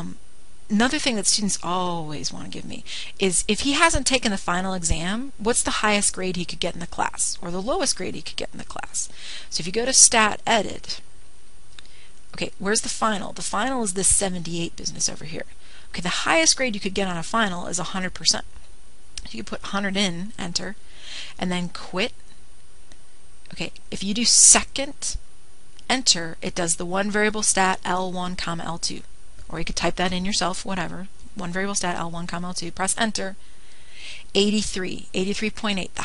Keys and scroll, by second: 12.3 Return, 14.7 (, 15.7 Down, 16.3 Down, 16.4 Down, 16.9 Down, 18.6 1, 19.5 0, 19.8 0, 21.9 Return, 27.4 Return, 34.5 Return.